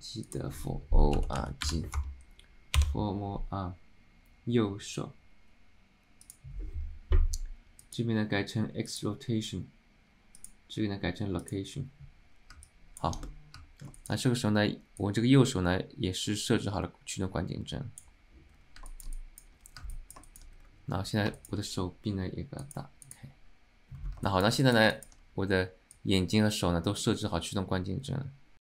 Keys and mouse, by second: 12.7 middle click, 13.3 middle click, 14.1 alt+shift+middle click, 15.2-18.2 drag, 19.0 shift+middle click, 19.3 middle drag, 20.0 alt+middle drag, 20.4 alt+shift+middle click, 21.5 alt+shift+middle click, 22.7 click, 23.1 click, 24.4 shift+middle drag, 24.7 middle click, 25.1 alt+shift+middle click, 26.1-28.7 drag.